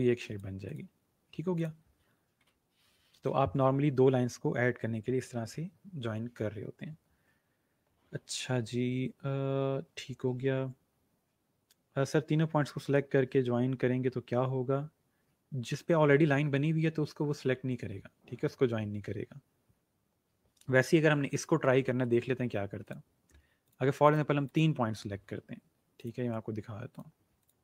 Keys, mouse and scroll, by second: 21.0 ctrl+z, 22.7 click.